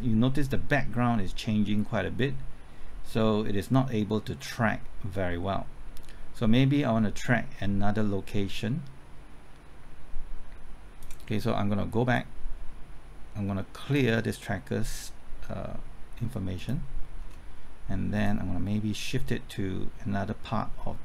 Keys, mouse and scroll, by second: 17.2-18.2 scroll up 1, 18.2-21.0 drag.